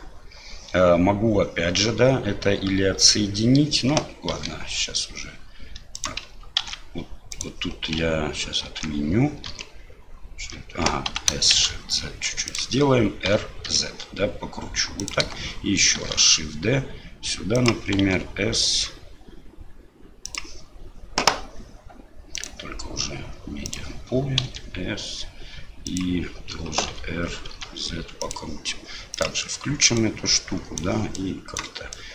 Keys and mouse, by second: 4.3 shift+d, 6.6 ctrl+a, 8.6 ctrl+z, 9.5 ctrl+z, 11.1 s, 13.3 r, 16.0 shift+d, 18.0 s, 22.4-23.7 drag, 26.9 r, 29.1 click, 29.9 right click, 30.8 click, 31.1 right click, 31.9 right click.